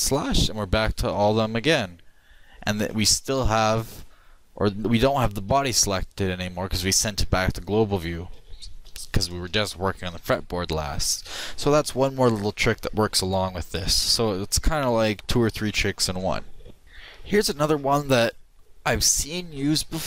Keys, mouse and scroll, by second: 0.0 shift+KP_Divide, 5.7-8.7 middle drag.